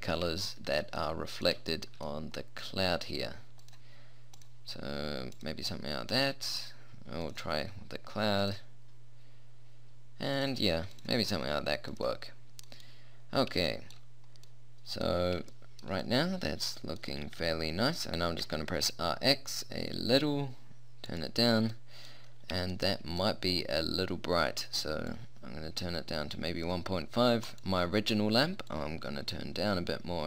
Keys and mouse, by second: 0.2-1.8 middle drag, 3.6-12.7 drag, 17.3 r, 18.2 r, 25.2-30.2 drag.